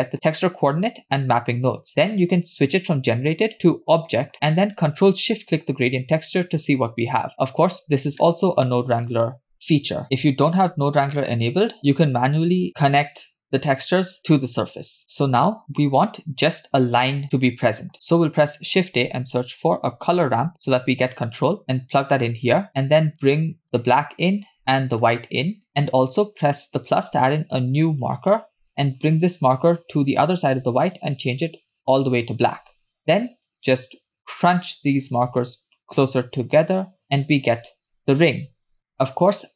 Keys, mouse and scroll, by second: 0.3 click, 1.6 click, 3.8 click, 5.3 ctrl+shift+drag, 8.2 middle click, 10.5-11.7 scroll down 2, 11.7 scroll down 1, 11.8 click, 15.0 middle click, 15.0 scroll up 3, 18.2 shift+a, 23.6 click, 25.0-25.7 drag, 26.7-27.1 drag, 28.0 click, 29.0-30.3 drag, 30.9 click, 33.4-35.2 drag, 36.0-37.5 drag, 38.8-39.5 scroll up 5, 38.9 middle click.